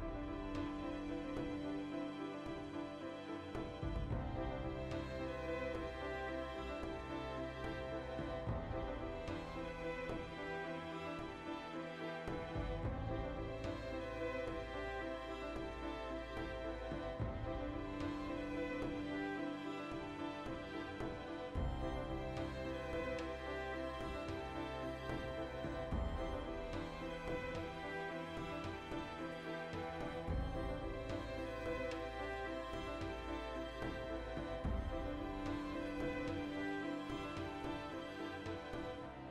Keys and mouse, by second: 1.5 alt+q, 1.7-4.2 ctrl+middle drag, 4.2-4.5 right drag, 4.6 alt+q, 4.9-7.0 ctrl+shift+middle drag, 7.0-7.7 shift+right drag, 7.9 \, 8.2 right drag, 8.3-10.2 shift+middle drag, 8.5 Tab, 10.2 alt+right click, 10.4-12.6 alt+middle drag, 12.6 alt+shift+right click, 12.8-16.2 middle drag, 13.4 ctrl+KP_Add, 13.8 ctrl+KP_Subtract, 16.0 2, 16.2 alt+shift+right click, 16.8 ctrl+x, 17.1-18.7 middle drag, 18.5 3, 18.7 alt+right click, 18.9-20.3 middle drag, 20.3 alt+right click, 20.8 ctrl+KP_Add, 21.1 ctrl+KP_Subtract, 21.8-25.4 middle drag, 21.9 alt+o, 24.5 r, 25.4 click, 25.8 s, 26.3 click, 26.4 g, 27.2 click, 27.3-31.0 middle drag, 29.5 ctrl+KP_Add, 29.8 x, 31.0 click, 31.5-38.4 shift+middle drag, 34.2 alt+q, 38.4 right click, 38.7-39.3 ctrl+shift+middle drag.